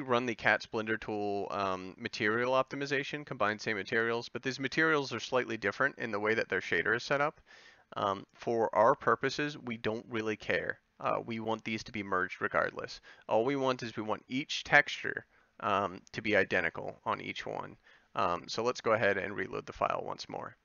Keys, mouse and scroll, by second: 3.6-9.2 middle drag, 12.1-17.5 middle drag, 19.1-20.6 drag.